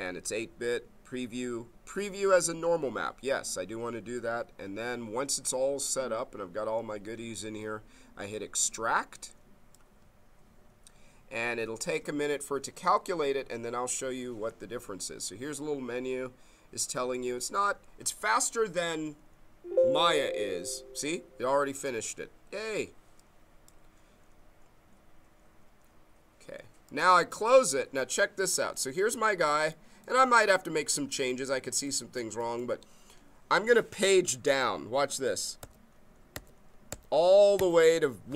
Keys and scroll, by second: 35.6 Page_Down.